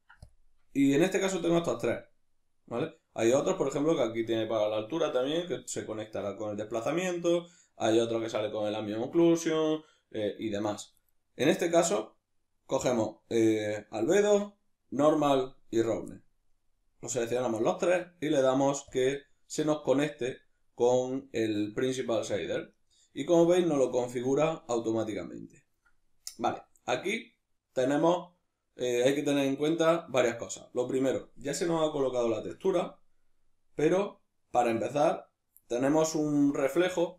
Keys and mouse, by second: 22.7-32.6 middle drag.